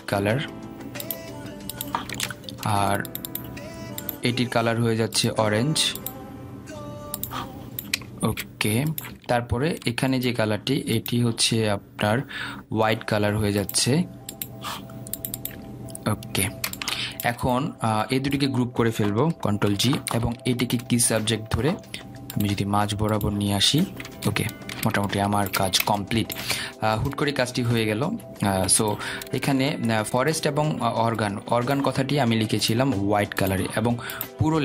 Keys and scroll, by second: 21.1 ctrl+g.